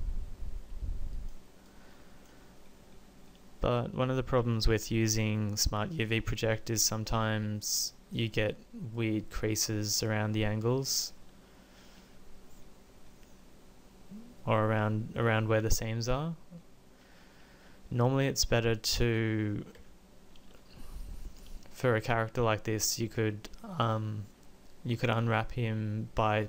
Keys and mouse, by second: 10.8 Tab, 19.9 Tab, 20.9 Tab.